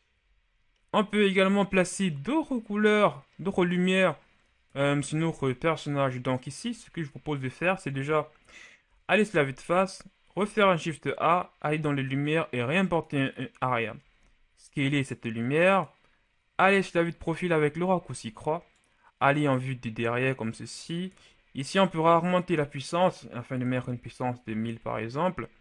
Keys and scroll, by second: 4.6 KP_1, 6.5 KP_3, 8.7 KP_1, 10.2 a, 13.9 s, 16.5 KP_3, 23.6 KP_1, 23.8 KP_0, 24.0 KP_0, 24.3 KP_0, 24.7 Return.